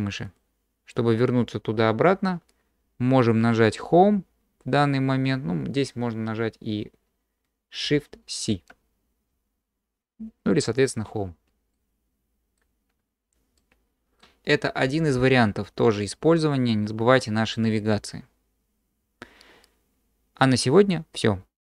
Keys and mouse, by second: 8.5 shift+c, 11.7-12.6 middle drag, 13.6-14.2 drag.